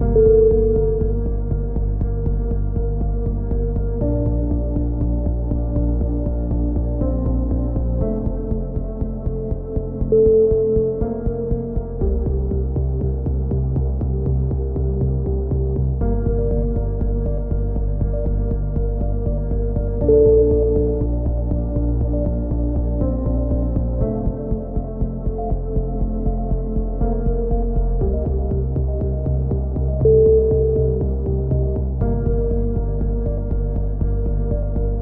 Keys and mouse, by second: 0.6-1.7 drag, 1.7 middle click, 2.4 z, 2.8 z, 3.5 z, 6.8-8.1 middle drag, 8.1 z, 8.6 z, 8.9 Tab, 9.1 z, 9.4 click, 12.0 KP_3, 12.3 middle click, 12.3 z, 13.0 z, 13.7 middle click, 14.6-15.8 right drag, 15.3 z, 15.8 click, 21.1 ctrl+z, 21.6-22.7 drag, 23.2 right click, 24.0 middle click, 24.8 click, 26.3-27.8 drag, 26.9 right click, 29.3 a, 29.6 z, 29.8 click, 30.5 middle click, 31.0 click, 31.3-32.5 right drag, 32.5 click, 34.3-35.0 right drag.